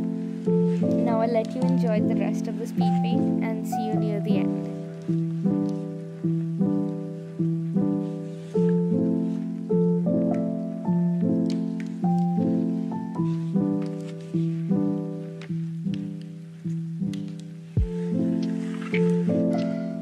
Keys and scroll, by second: 1.6 space, 1.8 z, 3.7 space, 4.8 space, 7.6 ctrl+z, 8.9 z, 9.0 space, 11.9 space, 12.7 space, 14.1 ctrl+z, 15.9 ctrl+z, 18.5 ctrl+z, 19.6 z, 19.7 space, 19.8 z.